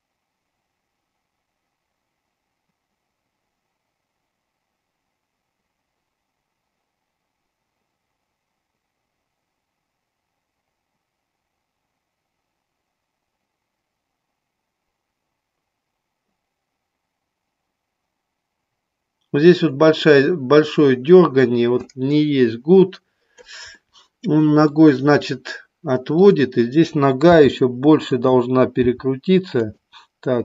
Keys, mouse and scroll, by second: 23.8 middle click, 26.2 click, 27.3 g, 28.0 click, 28.8 r, 29.6 click.